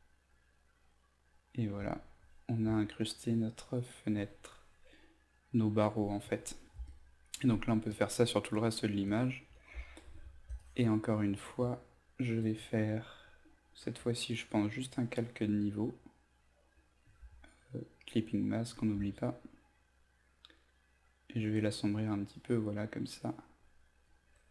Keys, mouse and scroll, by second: 6.2 z, 6.8 alt+click, 7.8 alt+click, 8.5 alt+click, 10.5 click, 18.3 alt+click, 19.9-24.0 drag.